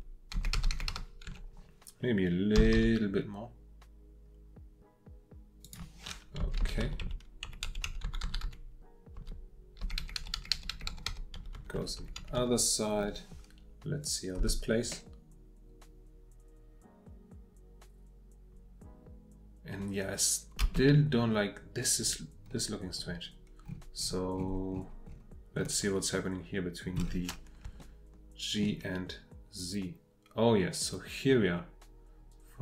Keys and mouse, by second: 0.3 Right, 0.3 Left, 0.5 Left, 1.3 Right, 2.5 g, 2.7 y, 5.6 click, 6.4 Left, 6.6 Left, 6.8 Right, 7.0 Right, 7.4 Right, 7.6 Right, 7.8 Right, 8.0 Right, 8.2 Right, 8.4 Right, 9.1 Right, 9.8 Left, 10.0-11.3 Left, 11.3 Right, 11.5 Right, 11.7 Right, 12.0 Right, 12.2 Right, 12.4 Right, 14.0 click, 14.4 space, 20.6 space, 27.9 shift+middle click, 29.5-32.6 drag.